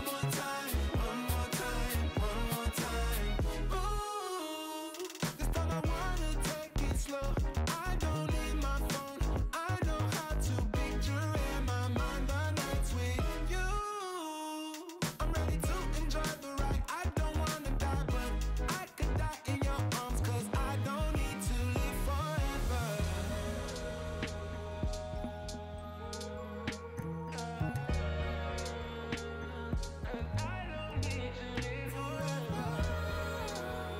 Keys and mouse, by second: 0.4 click, 0.7 shift+click, 1.4 click, 2.2 click, 2.8 space, 2.9 click, 3.6 click, 5.4 click, 5.6 click, 5.9 click, 6.2 click, 6.5 click, 6.8 space, 6.9 click, 7.8 click, 8.6 click, 9.2 click, 10.0 click, 11.4 click, 12.2 space, 12.5 click, 13.1 click, 13.2 click, 13.4 click, 13.5 space, 13.6 click, 13.9 click, 14.1 click, 14.3 click, 14.5 click, 14.8 click, 15.0 space, 15.3 click, 15.6 space, 15.9 click, 16.1 click, 16.3 click, 16.6 click, 16.7 click, 16.9 click, 17.0 space, 17.7 click, 18.2 click, 18.5 x, 18.6 click, 18.8 click, 19.0 click, 19.3 click, 19.7 click, 19.9 click, 20.2 space, 20.2 click, 20.6 click, 21.0 click, 21.5 click, 22.1 click, 23.3-26.3 typing, 23.4 click, 23.6 click, 24.3 click, 24.6 click, 24.8 click, 25.0 click, 25.2 click, 25.7 click, 26.4 click, 27.0 shift+click, 27.4 space, 27.5 click, 27.8 shift+click, 28.3 shift+click, 28.8 click, 29.0 click, 29.4 click, 29.4 space, 29.9 click, 30.3 click, 30.6 space, 30.7 click, 31.0 click, 31.2 space, 31.5 click, 31.8 click, 32.2 space, 32.5 click, 33.3 click.